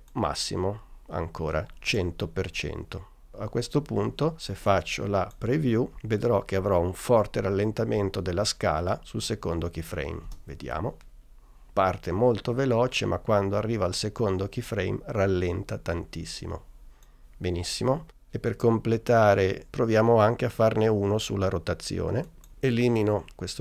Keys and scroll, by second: 6.1 n, 10.3 space.